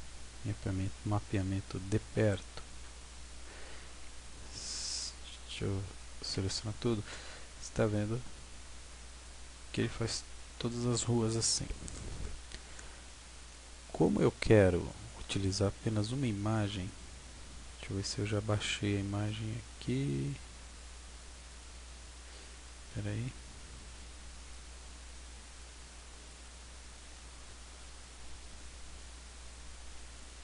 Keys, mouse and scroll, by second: 1.1-1.5 scroll up 5, 1.8 middle click, 5.8 a, 6.2 a, 6.7-7.4 scroll down 2, 7.4-7.7 scroll down 1, 7.9 scroll up 2, 8.8-9.6 scroll down 6, 9.8 middle click, 13.8-14.4 scroll up 2, 14.4-14.9 scroll down 2, 14.9-15.4 scroll down 4, 15.4 scroll down 1, 18.6 click, 24.5 click, 26.2 click.